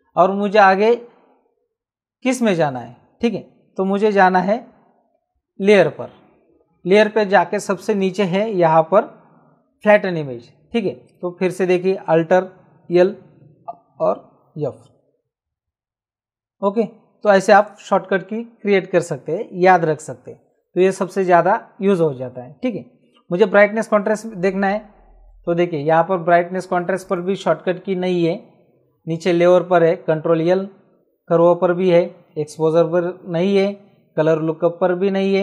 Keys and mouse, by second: 5.1 alt+l, 11.0 click, 14.9 alt+f, 25.7 click, 27.0 click.